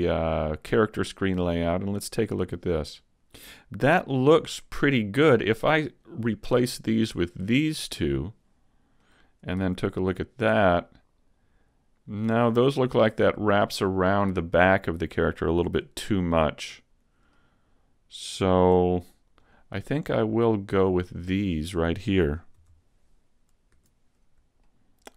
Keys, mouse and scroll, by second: 5.4 shift+right click, 5.9 shift+right click, 6.8 shift+right click, 7.4 shift+right click, 9.1 middle click, 9.6 z, 10.0 middle click, 14.7 middle click, 17.4 middle click, 19.5 shift+right click, 19.9 shift+right click, 20.5 shift+right click, 21.0 shift+right click, 21.4 middle click, 22.6 KP_3, 23.7 z, 24.7 shift+middle click.